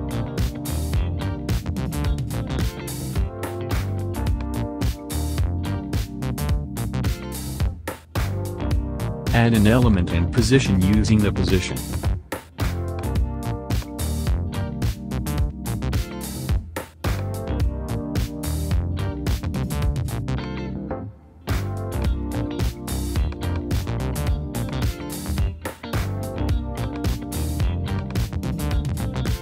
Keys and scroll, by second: 1.4 space.